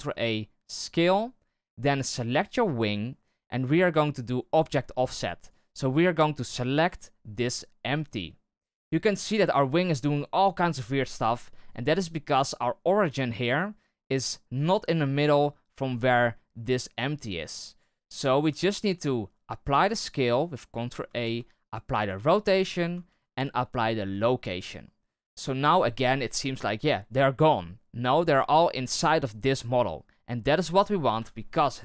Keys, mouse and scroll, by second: 2.2 right click, 4.5 click, 5.4-6.9 drag, 9.2-9.7 right drag, 15.9 right click, 17.5 right click, 18.7 ctrl+a, 21.1 ctrl+a, 31.1 KP_7.